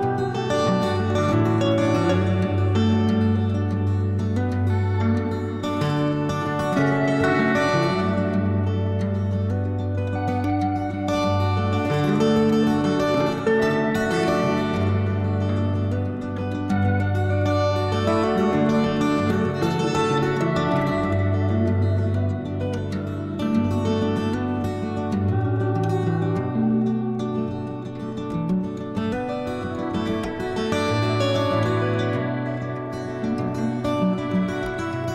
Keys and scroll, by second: 3.1-4.3 typing, 8.4 alt+a, 14.1 s, 17.5 s, 24.1 s.